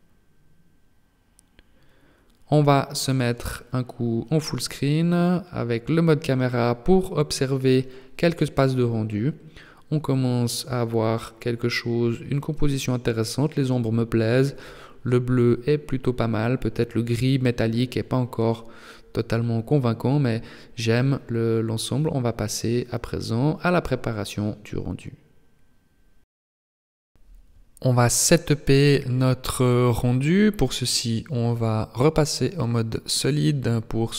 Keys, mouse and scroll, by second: 2.7 click, 28.8-30.4 scroll down 2, 33.2 click.